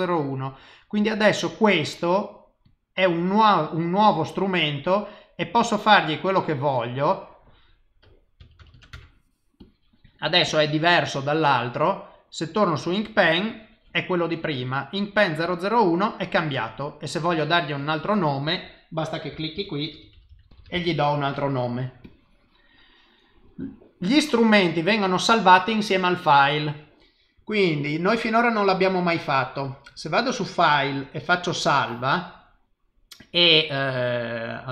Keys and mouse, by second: 5.6 click, 7.3 click, 8.7 KP_0, 9.6 click, 10.4 click, 11.8 click, 13.2 click, 14.4 click, 16.1 click, 17.8 click, 19.9 n, 20.5 l, 22.0 click, 29.0 click.